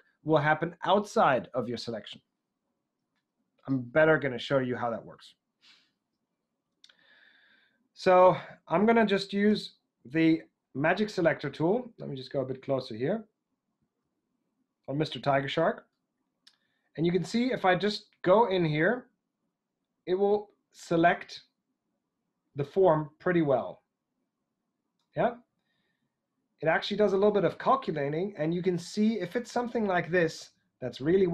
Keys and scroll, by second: 4.7 super+Tab, 9.4 w, 11.5 alt+w.